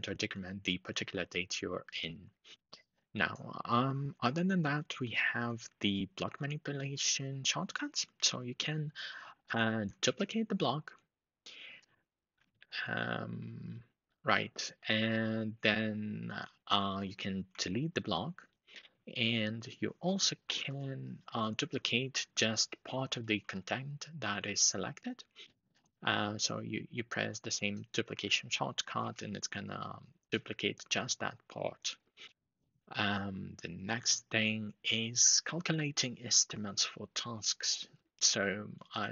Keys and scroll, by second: 9.7 shift+super+d, 12.2 shift+super+d, 17.3 alt+k, 20.3 alt+shift+Left, 23.0 shift+super+d, 28.7 shift+super+d.